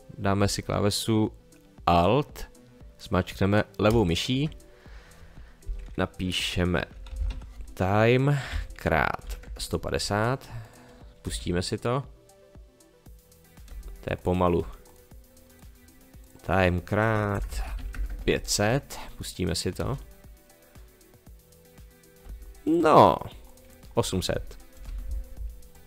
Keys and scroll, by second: 6.9 t, 7.1 i, 7.2 m, 7.3 e, 8.5 *, 9.2 1, 9.4 0, 11.2 space, 13.7 space, 17.3 BackSpace, 17.8 5, 17.9 0, 19.8 space, 22.2 space, 24.7 BackSpace, 24.8 8.